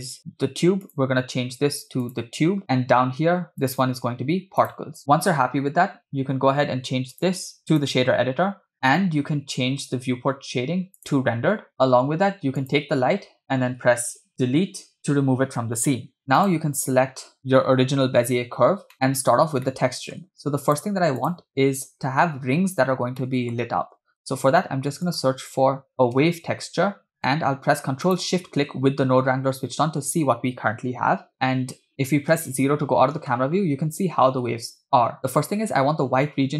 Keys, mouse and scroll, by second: 0.8-2.6 drag, 2.6 middle click, 2.6 scroll up 4, 3.6-5.0 drag, 7.1 click, 8.8 middle click, 8.8 scroll down 4, 12.9 click, 15.0 Delete, 16.4-16.8 drag, 18.9 middle click, 18.9 scroll down 2, 19.7 middle click, 20.7 click, 21.2 click, 23.2 middle click, 23.6-23.9 scroll down 2, 24.3 shift+a, 27.2 click, 27.2 middle click, 27.2 scroll down 1, 28.4 ctrl+shift+click, 32.7 KP_0, 35.2-36.5 scroll up 3.